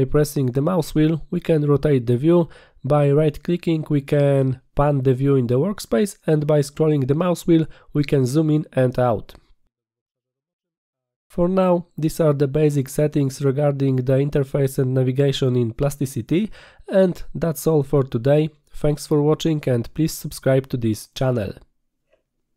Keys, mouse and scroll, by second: 1.2-1.9 middle drag, 2.6-4.5 middle drag, 5.5-7.5 right drag, 10.2-10.9 scroll up 3, 11.2-12.4 scroll down 7, 12.5-13.0 scroll up 4.